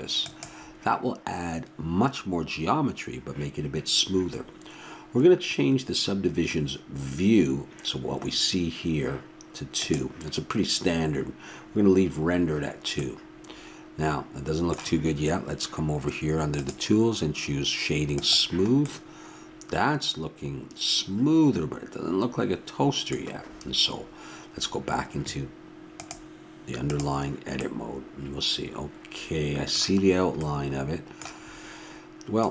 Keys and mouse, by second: 9.8-11.6 drag, 16.5-20.0 drag, 18.9-26.0 middle drag, 26.0-27.7 drag, 27.6-32.5 middle drag.